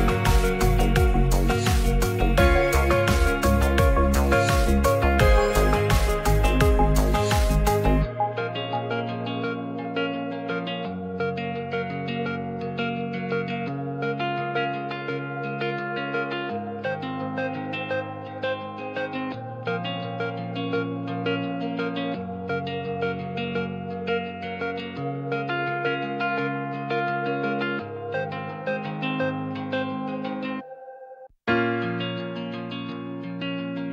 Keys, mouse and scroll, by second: 0.2 Tab, 0.8 Tab, 1.1 ctrl+r, 3.7 3, 4.8 Tab, 5.3 Tab, 5.6 Tab, 6.5 Tab, 7.5 ctrl+r, 8.5 ctrl+z, 8.7 ctrl+z, 10.0-10.8 drag, 11.3 shift+middle click, 12.0 click, 12.7 Tab, 13.2 ctrl+r, 14.3 click, 14.7 3, 15.8 middle click, 16.7 shift+click, 16.9 middle click, 17.5-18.4 right drag, 19.7 click, 20.0 middle click, 22.1 click, 22.5 scroll up 1, 22.6 middle click, 22.7 scroll down 1, 23.2 shift+middle click, 23.5 scroll up 1, 23.5 middle click, 24.0 Tab, 26.0-27.2 drag, 29.8 click, 30.5 middle click, 31.1 g, 32.4 Tab, 33.1 ctrl+r.